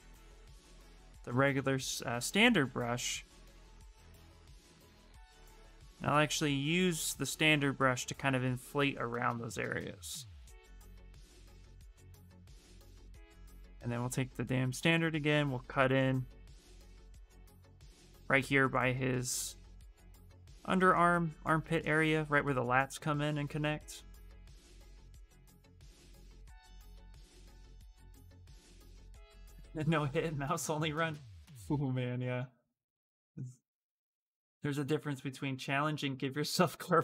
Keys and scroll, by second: 2.0 s, 3.2 s, 13.0-14.1 typing, 17.2 s, 20.0 s.